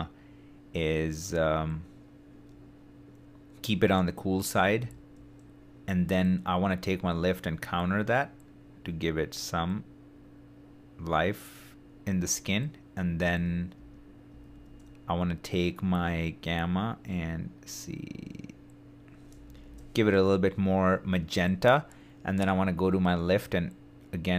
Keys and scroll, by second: 13.3 super+d, 19.4 super+d.